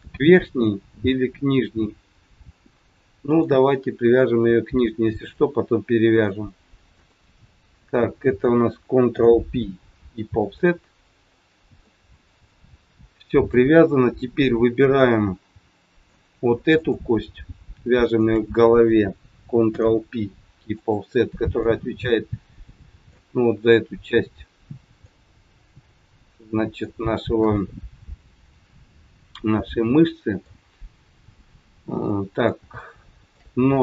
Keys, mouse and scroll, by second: 3.3 click, 4.2 shift+click, 5.1 click, 6.1 click, 6.9 shift+click, 9.1 ctrl+p, 11.1 scroll down 3, 11.8 middle click, 12.7 shift+middle click, 13.8 scroll up 2, 14.9 middle click, 16.7 click, 17.9 shift+click, 19.7 ctrl+p, 21.7 middle click, 25.1 middle click, 28.9 middle click, 30.8 click, 32.1 middle click, 32.7 shift+middle click.